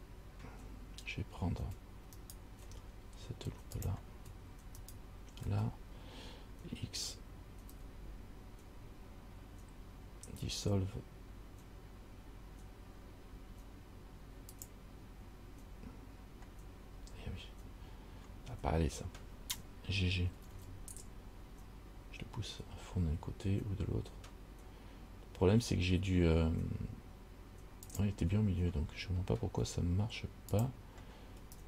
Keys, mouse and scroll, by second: 2.4 alt+right click, 2.8 scroll up 1, 4.0 click, 5.0 alt+right click, 7.9 x, 20.5 g, 30.8 click.